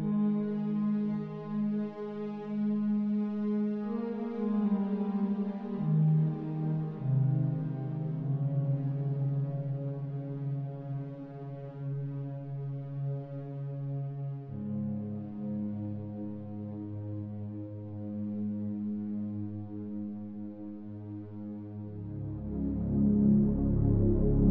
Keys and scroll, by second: 16.8 Return.